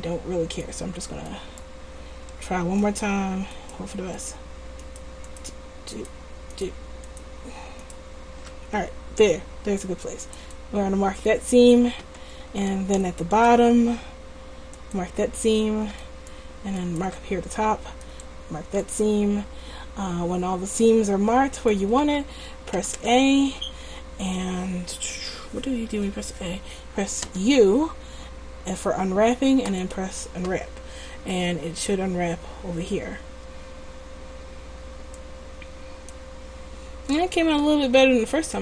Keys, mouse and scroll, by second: 2.9-9.6 middle drag, 13.1-14.6 right drag, 14.6 click, 16.1 middle click, 16.8-18.1 middle drag, 18.5 middle click, 18.7 click, 19.8-20.8 middle drag, 21.8-22.8 middle drag, 22.8 a, 23.1 a, 27.3 u, 31.0-34.8 middle drag, 35.6-37.1 middle drag, 37.6 r.